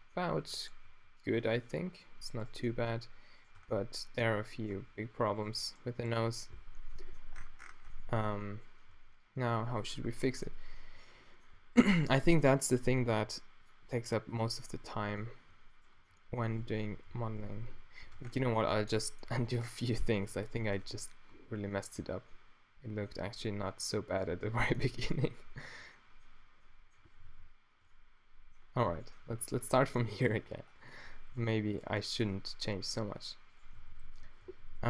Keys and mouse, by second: 0.5 Tab, 0.8 g, 3.6 Tab, 4.8 Tab, 6.7 -, 7.6 middle click, 8.9 q, 10.0 o, 13.1 g, 13.9 r, 15.0 z, 16.7-21.3 typing, 18.2 Tab, 23.3 z, 24.3 z, 25.3 z, 27.3 shift+z, 29.3 a, 29.9 Tab, 33.0 d, 33.7 f, 34.5 z.